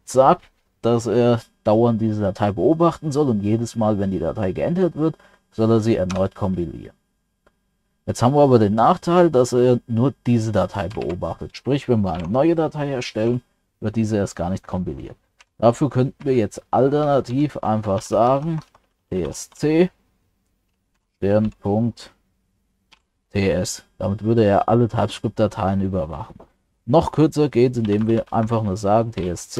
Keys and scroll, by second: 11.0 ctrl+c.